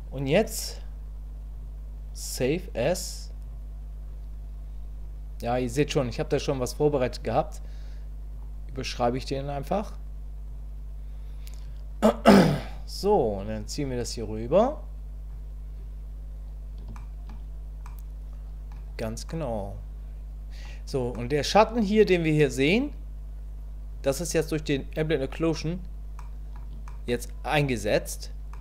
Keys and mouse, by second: 1.5-3.6 drag, 13.6-15.3 drag, 16.9 shift+click, 17.9 middle click, 19.3-21.4 middle drag, 26.2 middle click, 26.9 shift+click, 28.5 middle click.